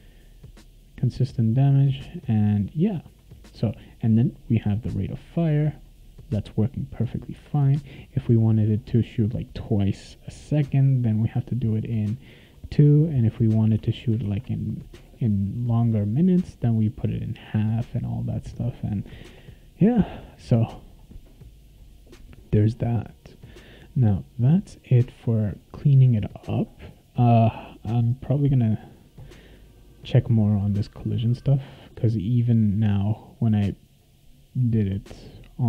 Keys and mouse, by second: 0.6 click, 1.0 click, 1.5 click, 2.1 click, 2.6 click, 3.5-7.4 right drag, 3.9-7.3 drag, 8.2 click, 10.8 click, 12.0 click, 13.4 click, 13.8 2, 14.2 ctrl+s, 19.2 ctrl+s, 25.9 click, 27.3 click, 28.3 click, 31.3 click, 33.4 click.